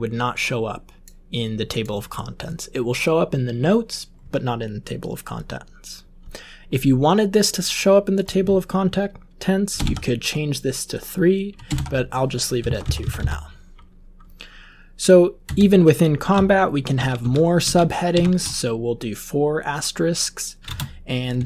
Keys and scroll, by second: 9.7 BackSpace, 9.7 BackSpace, 11.6 typing, 12.6 Down, 12.8 Down, 13.0 Down, 13.1 Down, 15.4 Return, 16.9-18.1 typing, 20.6-21.4 typing.